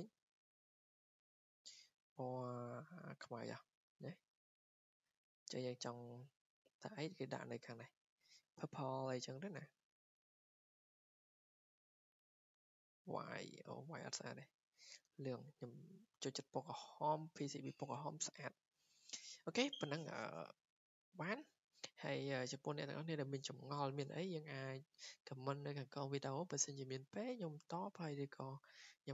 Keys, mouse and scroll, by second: 0.3 click, 0.7 click, 1.6 click, 3.2 click, 7.0 click, 8.2 click, 9.1 click, 10.1 click, 10.5 click, 12.5 click, 13.4 click, 14.1 click, 14.8 click, 15.6 click, 16.5 scroll down 3.